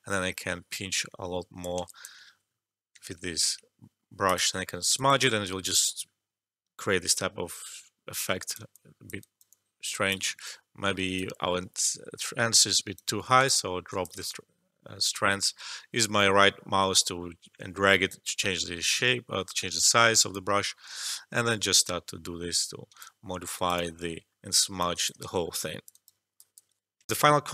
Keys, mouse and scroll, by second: 2.2 ctrl+z, 4.2 click, 4.9-8.7 alt+drag, 8.7 alt+click, 9.2 alt+right click, 9.5 alt+click, 10.2 ctrl+z, 11.1-13.4 right drag, 13.4 alt+click, 14.2-20.3 right drag, 20.3-23.2 drag, 23.2 alt+click, 23.5 alt+right click, 23.7 alt+click, 24.8 alt+click, 25.2 alt+shift+middle click, 25.5 alt+click, 25.9 alt+right click, 26.3 alt+click, 27.0 alt+F12.